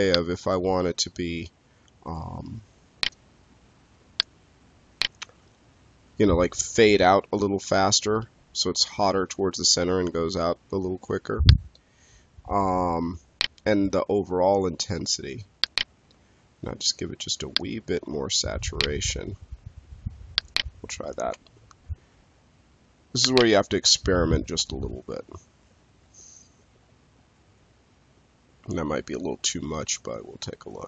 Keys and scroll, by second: 21.1 space.